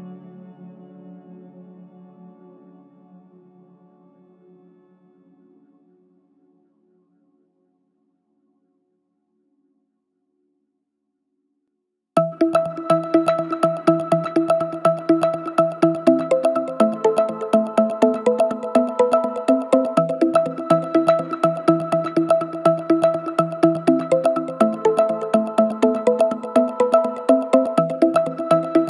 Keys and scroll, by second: 3.7 4, 4.2 3, 5.1 ], 5.6 ], 9.9 4, 14.2 3, 17.7 ], 19.7 4, 20.9 3, 21.2 ], 25.3 ], 25.9 ], 27.2 4.